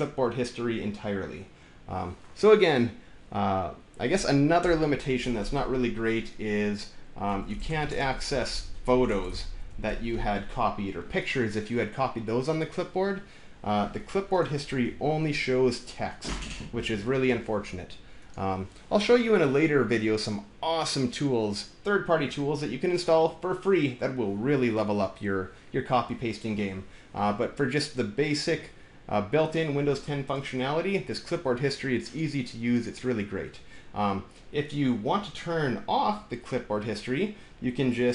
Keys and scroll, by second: 4.4 Return, 7.0-10.2 typing, 14.7 super+v.